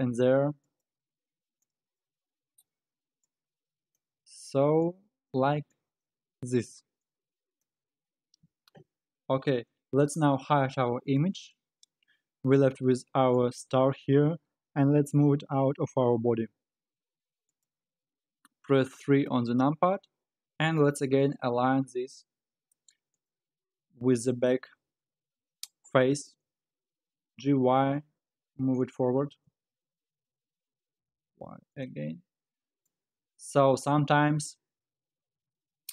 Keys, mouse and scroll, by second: 0.6 click, 1.6 shift+click, 2.5 f, 3.2 click, 4.1 f, 4.8 click, 5.7 shift+click, 6.3 f, 7.1 click, 7.8 f, 8.4-8.8 scroll up 2, 8.8 Tab, 11.0-12.5 drag, 12.5-14.8 middle drag, 14.8 g, 18.8 KP_3, 19.9-21.0 scroll down 2, 21.0 r, 24.9 alt+z, 27.3 g, 29.1 alt+z, 30.2 alt+z, 30.5 g, 32.5-33.0 middle drag, 33.0 scroll up 5, 33.4-34.5 middle drag, 34.5-34.8 scroll down 4, 34.8 alt+z, 35.4 alt+z, 35.5-35.9 middle drag.